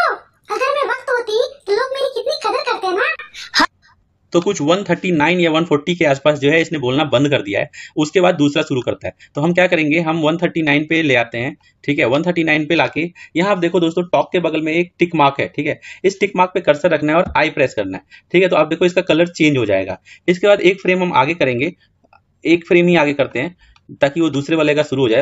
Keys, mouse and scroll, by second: 3.5-5.6 drag, 10.3 click, 17.5 i, 21.1-25.1 drag.